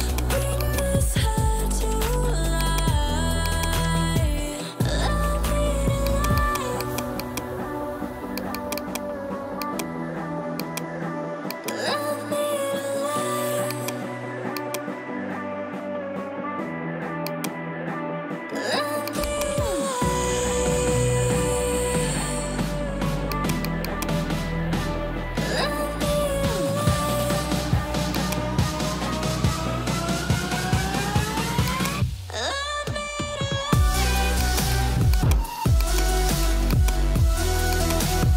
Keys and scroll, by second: 20.9-22.8 typing, 24.2-26.4 typing, 26.6 Return, 35.5 space.